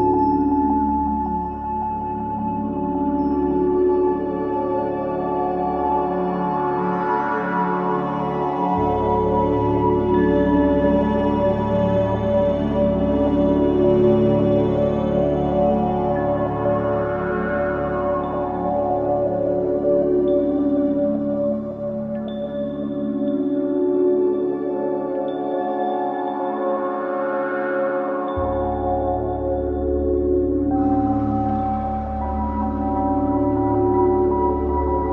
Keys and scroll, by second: 0.2 F9, 0.9 4, 2.8 2, 12.6 4, 16.2 3, 16.9 ctrl+d, 17.0 Escape, 18.6 4, 21.0 3, 24.8 Escape, 33.2 ].